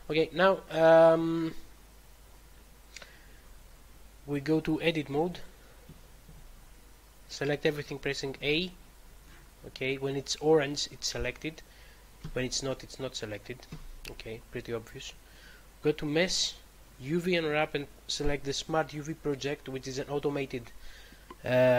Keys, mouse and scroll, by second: 2.1-3.5 scroll up 2, 4.6 click, 5.2 click, 5.8 a, 6.3 a, 7.6-8.2 typing, 12.2 a, 16.2 click.